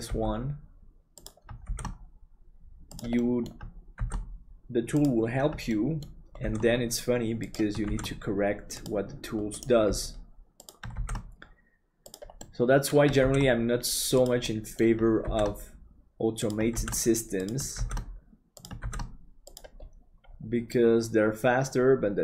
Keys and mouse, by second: 0.1 g, 1.7 shift+d, 3.2 middle click, 5.8 middle click, 9.8 g, 10.9 shift+d, 12.5 middle click, 14.5 middle click, 20.7-22.2 middle drag.